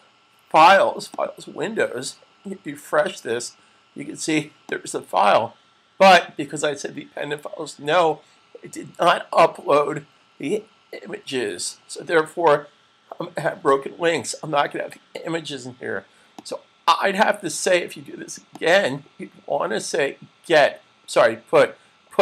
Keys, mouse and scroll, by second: 0.9 click, 5.0 click, 16.7 click, 20.5 click.